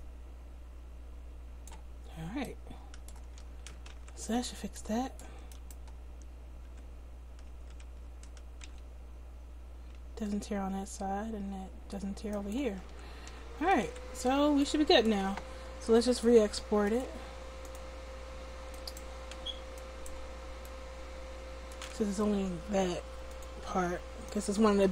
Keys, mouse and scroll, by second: 3.3 a, 3.6 a, 3.9 alt+r, 6.6 r, 12.8 a, 13.2 a, 13.8 alt+r, 18.8-21.6 middle drag.